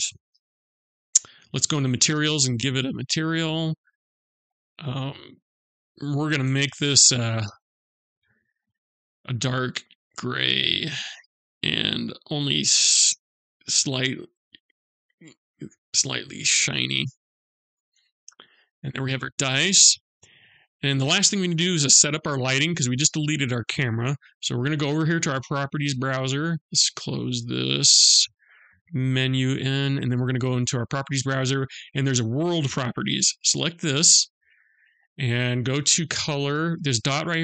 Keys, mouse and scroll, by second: 2.2 click, 3.9 click, 5.4 click, 9.1 click, 12.6 click, 16.6 middle click, 17.5-19.0 scroll up 3, 18.2 middle click, 19.0-19.6 scroll up 1, 19.6 middle click, 26.8 click, 28.5 n, 32.6 click.